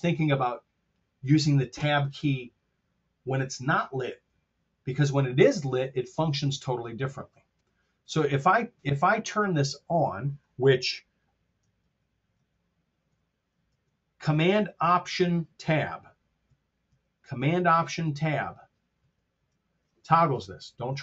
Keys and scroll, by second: 11.8 alt+shift+Tab, 13.6 alt+super+Tab.